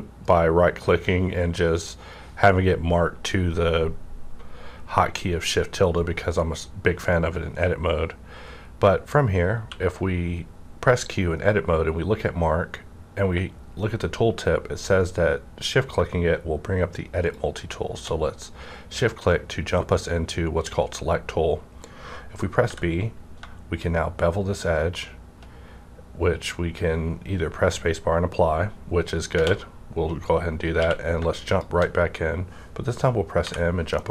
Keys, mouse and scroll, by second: 0.2 right click, 0.2 click, 6.5 right click, 6.5 click, 6.5 scroll up 1, 9.6 scroll up 1, 9.6 q, 15.9 scroll up 1, 15.9 q, 17.3-20.7 shift+drag, 22.6-28.0 shift+drag, 22.6 b, 29.3 space, 29.3 b, 30.8 q, 31.5 shift+click, 33.6 shift+click, 33.6 m, 33.9 middle click, 34.0 middle click.